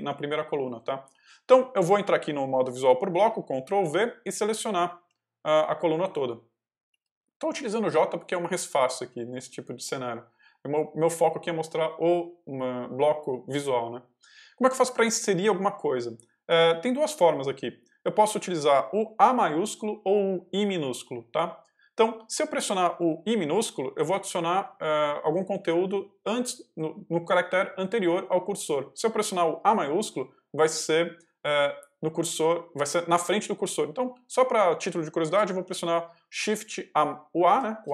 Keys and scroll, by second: 0.0 k, 3.6 ctrl+v, 4.2 y, 4.9 j, 37.4 shift+a.